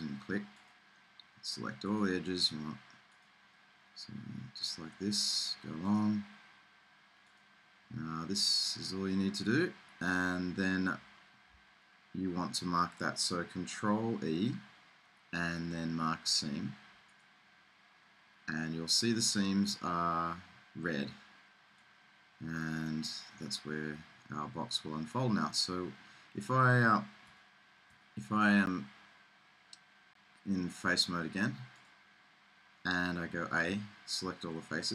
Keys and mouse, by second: 5.5 middle click, 5.9-9.1 drag, 9.7-14.3 middle drag, 14.3 ctrl+e, 18.4-19.4 middle drag, 19.4-21.3 drag, 21.3 middle click, 24.1-27.4 middle drag, 27.4 Tab, 28.3 Tab, 33.9 a.